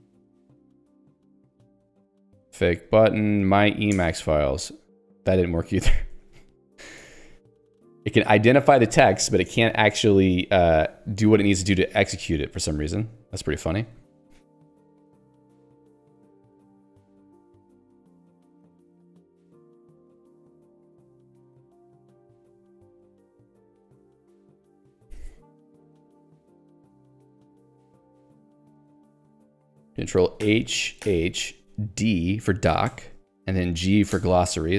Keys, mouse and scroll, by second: 0.4 ctrl+k, 2.6 ctrl+j, 4.2 Return, 7.0 Escape, 12.0 right click, 12.8 ctrl+g, 13.7 j, 15.6 k, 20.3 j, 32.9 d, 34.2 g.